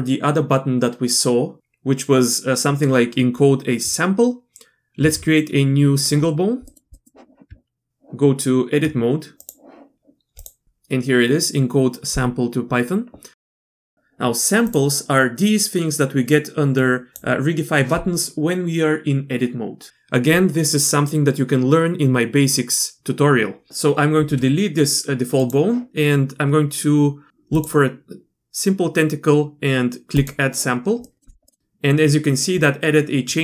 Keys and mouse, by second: 5.0 shift+a, 6.7 click, 6.9 click, 7.5 Tab, 9.4 click, 14.7 drag, 16.8 click, 23.7 x, 24.2 x, 27.5 click, 31.0 click, 31.5 click.